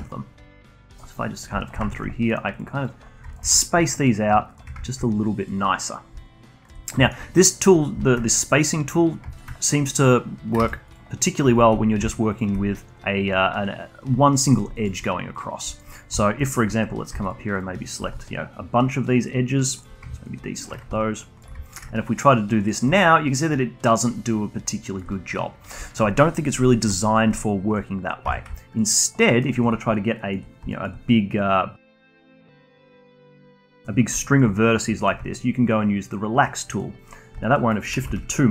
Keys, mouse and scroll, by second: 0.8-1.2 alt+drag, 1.6 alt+shift+click, 1.9-2.8 shift+right drag, 2.8 drag, 3.3 alt+shift+drag, 4.0 drag, 4.5 alt+shift+click, 4.9-5.9 shift+right drag, 5.9 click, 6.2-8.1 alt+drag, 8.4-10.6 right drag, 10.6 ctrl+z, 10.9 click, 11.5 shift+click, 12.3 alt+shift+click, 14.2-15.4 alt+drag, 15.7-17.3 alt+drag, 17.6 alt+shift+drag, 17.9 alt+shift+click, 18.2-20.3 alt+drag, 20.3 ctrl+shift+right click, 20.9-21.7 alt+drag, 21.7-23.0 shift+right drag, 23.0-28.3 alt+drag, 28.3 ctrl+z, 28.6-29.3 alt+drag, 29.3 alt+middle click, 29.5-32.2 alt+drag, 32.3 shift+drag, 32.7 shift+drag, 32.9 shift+click, 33.3 shift+drag, 33.5-35.0 alt+drag, 35.0-37.2 shift+right drag, 37.2 scroll up 1, 37.4-37.7 alt+drag, 37.7 alt+middle click, 38.0 ctrl+z.